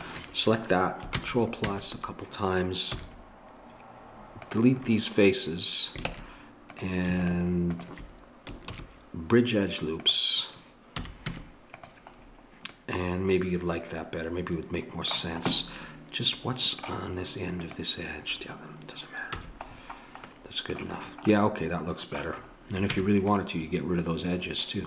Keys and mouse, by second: 1.2 ctrl+KP_Add, 2.9 x, 6.1 ctrl+Tab, 7.2-9.4 drag, 8.7 ctrl+e, 11.0 a, 11.3 Tab, 15.4-17.6 middle drag, 17.6-19.3 drag, 19.3 a, 22.9 Tab.